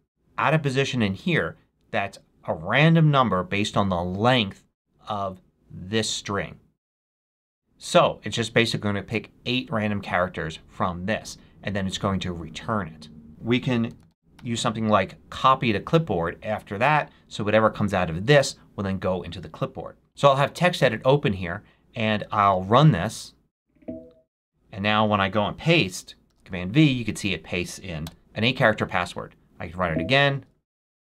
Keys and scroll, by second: 13.6-14.8 typing, 26.2 super+v, 27.2 super+v, 28.0 Return, 31.0 super+v.